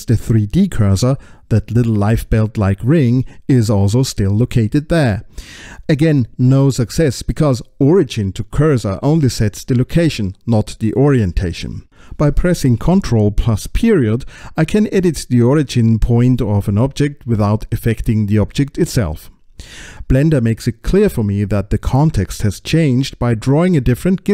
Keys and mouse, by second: 6.4-7.5 middle drag, 10.3 click, 12.5 middle click, 14.3 middle click, 18.4 middle click.